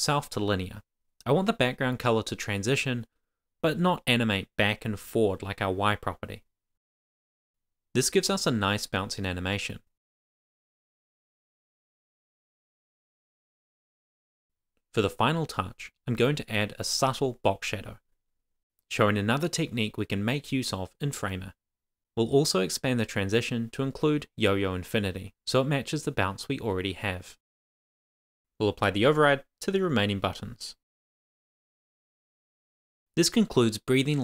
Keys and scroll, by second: 0.2 Right, 0.5 super+s, 14.0 shift+super+Left, 14.3 super+c, 15.5 Return, 15.6 super+v, 16.7 shift+super+Left, 16.9 super+c, 18.7 Return, 18.8 super+v, 20.6 super+c, 21.2 Return, 21.2 super+v, 22.0 super+c, 22.8 super+v, 23.0 super+s.